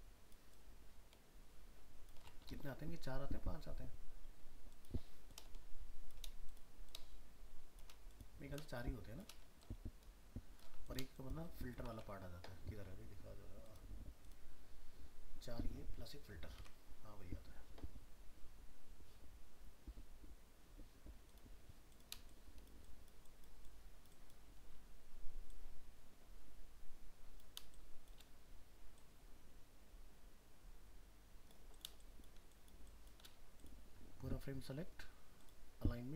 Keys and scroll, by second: 2.6 alt+Tab, 12.0 alt+Tab.